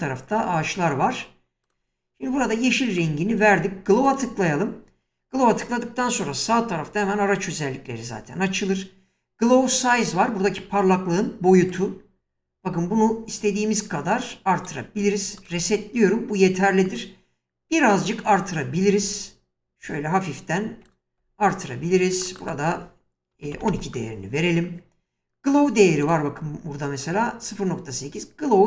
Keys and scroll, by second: 23.2-24.0 typing.